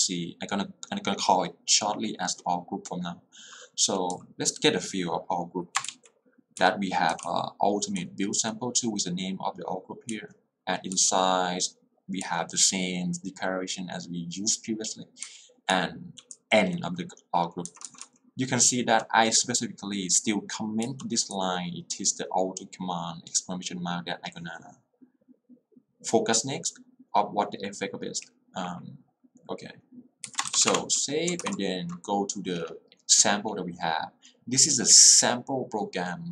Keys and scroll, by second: 3.9 j, 4.3 k, 6.7 Escape, 7.0-7.9 typing, 10.1 j, 15.8 h, 16.4 l, 17.8 k, 18.8 h, 21.3 l, 30.3 Escape, 30.7 w, 31.6 alt+l.